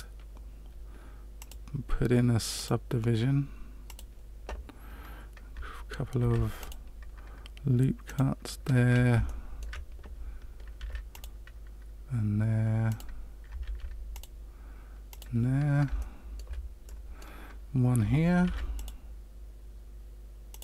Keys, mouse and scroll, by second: 1.3 click, 2.5 click, 6.2 ctrl+r, 9.4 shift+middle click, 10.7 ctrl+r, 13.6 ctrl+r, 15.9 shift+middle click, 18.4 ctrl+r.